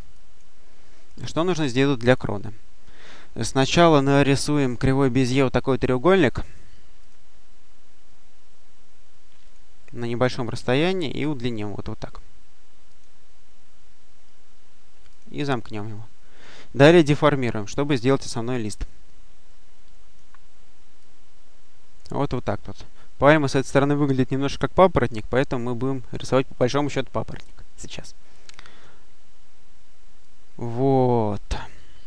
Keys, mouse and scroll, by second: 0.0 click, 2.0-2.5 scroll up 2, 4.1 click, 6.9 click, 9.3 click, 12.7 click, 15.0 click, 16.2 click, 18.7-20.5 drag, 20.9-22.7 drag, 23.2 click, 24.4 click, 25.7 click, 27.7-29.1 drag, 30.1-31.9 drag.